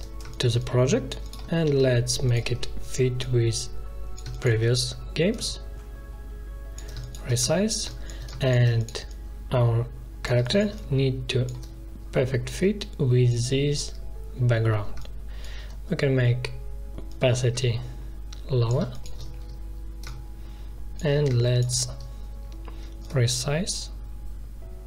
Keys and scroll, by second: 4.1 space, 6.9 space, 10.3 space, 18.7 space, 21.2 space.